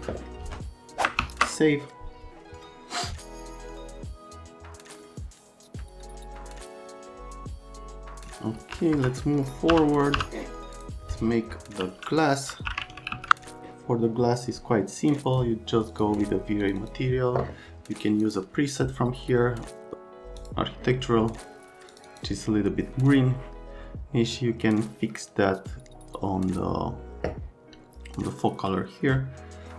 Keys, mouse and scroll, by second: 1.2 ctrl+s, 8.2 click, 8.6 F3, 8.9 F3, 9.7 n, 10.2 n, 10.8 click, 12.3-13.6 typing, 15.0 click, 15.9 click, 16.6 click, 16.8 click, 18.2 click, 20.4 click, 21.9 click, 22.1 click.